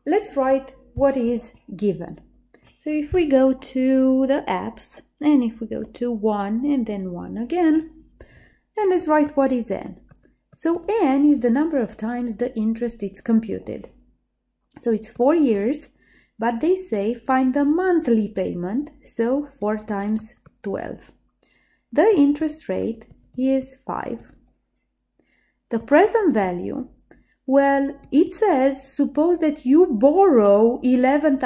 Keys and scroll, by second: 6.0 1, 7.1 1.